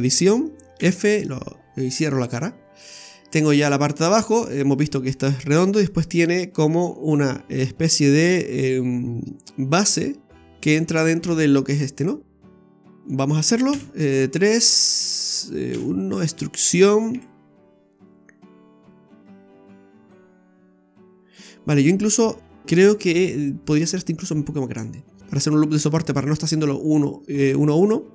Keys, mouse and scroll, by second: 0.8 f, 1.2-2.1 scroll up 3, 2.8 middle click, 12.2-12.6 scroll down 2, 12.7 middle click, 13.7 KP_3, 15.7 KP_1, 17.1 e, 21.8-22.2 scroll up 1, 22.2-22.6 scroll down 1, 22.6 s, 24.7 scroll up 2, 25.2 ctrl+z.